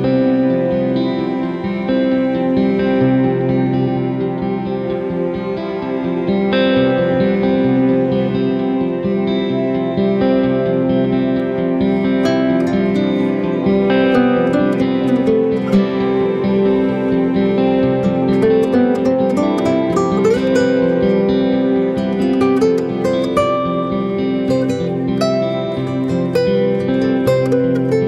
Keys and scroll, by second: 21.9-22.5 typing.